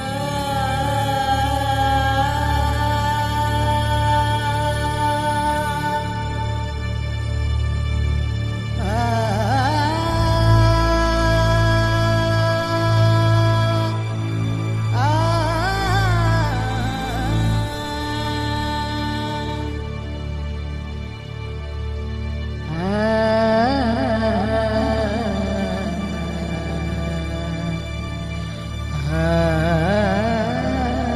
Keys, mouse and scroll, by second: 0.2 click, 0.7 middle click, 1.2-3.0 middle drag, 3.0 click, 3.2 Tab, 3.6 Tab, 3.9 alt+c, 4.5 Tab, 5.7-6.9 middle drag, 7.1 click, 7.5 ctrl+s, 7.9-9.0 middle drag, 8.6 e, 10.6 e, 12.0 middle click, 12.3 e, 13.5 Tab, 13.8 middle click, 15.2-16.2 middle drag, 16.4 middle click, 17.0 middle click, 17.9 Tab, 18.4 Tab, 18.8 click, 19.8 middle click, 21.4 Tab, 21.7 Tab, 21.9 middle click, 22.7 ctrl+s, 24.2 click, 24.9 middle click, 25.7 shift+z, 28.4 shift+z, 28.5 middle click, 29.5 shift+z, 30.3 shift+z, 30.4 click, 30.5 Tab.